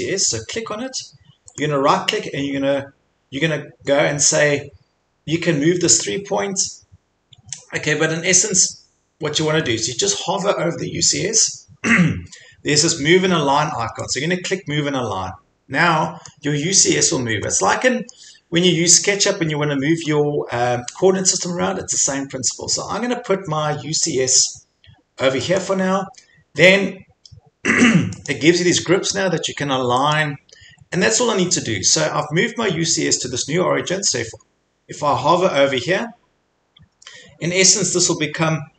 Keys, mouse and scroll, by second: 1.6 middle click, 6.6 middle click, 8.6 Escape, 14.1 click, 14.8-15.3 scroll, 16.3-16.7 scroll, 16.9-17.2 scroll, 18.1 middle click, 18.4 middle click, 18.5-18.8 scroll, 20.1 scroll, 20.6 scroll, 25.6 click, 28.3 click, 30.2 click.